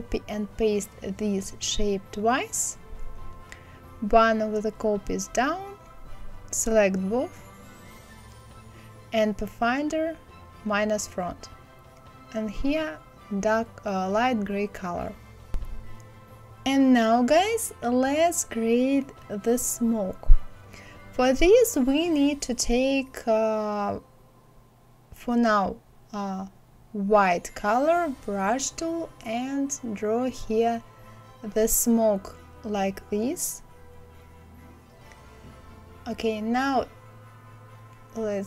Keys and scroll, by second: 1.4 ctrl+c, 1.7 ctrl+f, 1.9 ctrl+c, 2.1 ctrl+f.